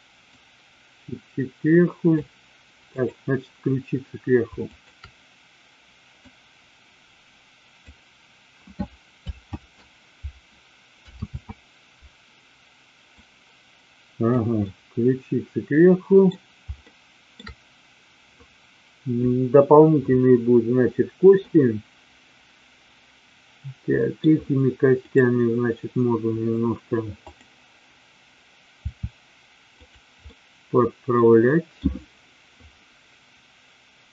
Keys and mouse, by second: 0.2-2.2 drag, 2.9-4.1 drag, 6.1-8.0 drag, 9.4 z, 11.4 z, 13.2-14.2 drag, 14.6-16.2 middle drag, 16.9-17.2 shift+middle drag, 21.5-24.1 middle drag, 27.1-28.2 drag, 28.8 r, 29.9 click, 30.2-31.8 middle drag.